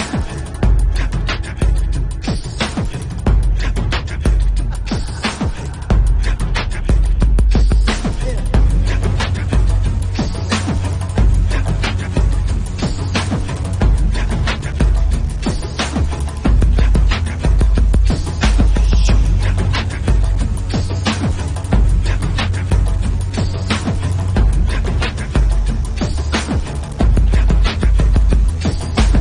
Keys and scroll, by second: 1.1 ctrl+s, 3.0 [, 5.9 [, 6.9 ctrl+s, 7.7 ctrl+s, 10.2 ctrl+s, 10.8 [, 11.0 ], 12.0 3, 16.0 ctrl+s, 17.3 ctrl+s, 17.7 ctrl+s, 19.3 b, 19.8 [, 21.2 6, 22.3 shift+h, 22.4 a, 22.5 Return, 23.2 ctrl+alt+z, 23.4 3.